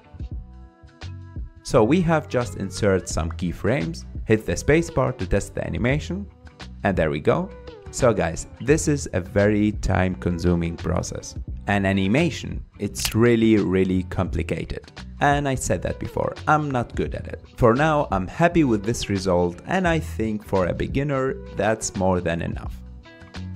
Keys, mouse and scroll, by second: 0.2 g, 0.8-1.4 drag, 1.4 g, 2.3 click, 3.3-4.1 middle drag, 4.1 space, 4.7-5.6 middle drag, 5.6 scroll down 1, 5.9-11.1 middle drag, 14.9 space, 15.7 ctrl+s, 16.2 click, 16.5 click, 17.0 ctrl+Tab, 17.3 click, 18.3 click, 18.8 h, 19.0 click, 19.1 h, 19.3 space, 19.4-21.9 middle drag.